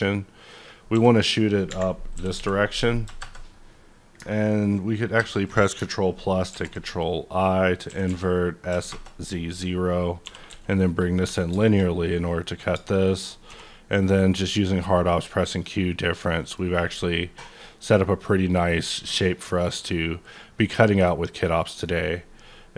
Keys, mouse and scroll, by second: 0.5 click, 0.9 s, 2.1 s, 2.3 z, 3.0 KP_0, 3.3 KP_Enter, 5.1 ctrl+KP_Add, 6.5 ctrl+i, 7.9 s, 8.0 z, 8.7 KP_0, 8.8 KP_Enter, 9.5 scroll down 1, 9.6-10.2 scroll up 4, 10.2 g, 10.5 z, 11.0 click, 11.2 Tab, 11.3-12.3 scroll down 7, 11.6 shift+middle click, 12.0 middle click, 13.1 shift+click, 13.5 q, 14.6-14.9 drag, 15.4 middle click, 15.9 scroll down 2, 16.2-17.9 middle drag, 17.5 click, 17.9-22.7 middle drag.